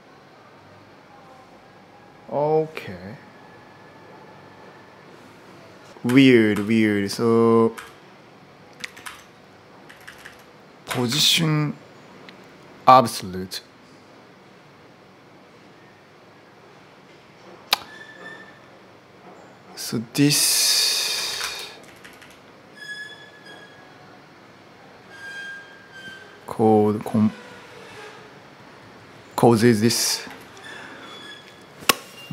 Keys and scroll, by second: 5.9 u, 6.3 u, 7.5 u, 8.5-11.2 typing, 8.8 ctrl+u, 20.9-22.4 typing, 30.0 0.